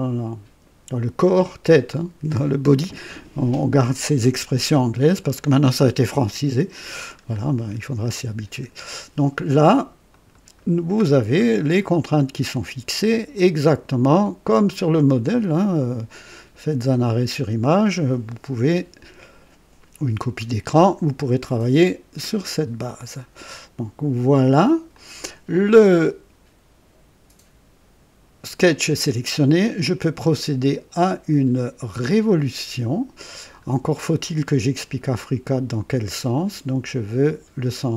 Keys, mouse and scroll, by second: 4.6-5.1 scroll up 1, 5.3-6.0 right drag, 7.3 scroll up 2, 8.0 scroll up 2, 10.0 click, 11.0-11.4 scroll down 2, 11.6-13.3 right drag, 14.7 click, 22.2 click, 24.9 click, 32.2 click, 33.7-34.0 scroll down 1, 34.2-35.2 right drag, 36.3 click.